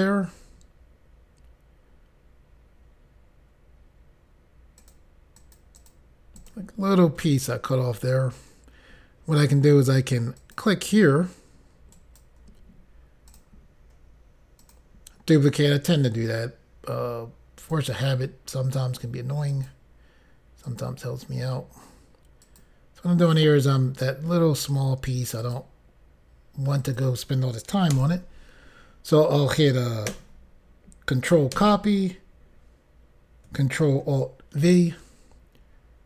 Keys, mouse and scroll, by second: 4.9 click, 5.5 click, 6.0 double click, 6.5 click, 10.5 click, 12.0 right click, 13.4 click, 14.7 click, 17.7 click, 19.6 click, 20.8 click, 22.5 click, 23.4 click, 25.5 click, 26.9 click, 28.0 Return, 31.7 ctrl+c, 34.7 ctrl+alt+v.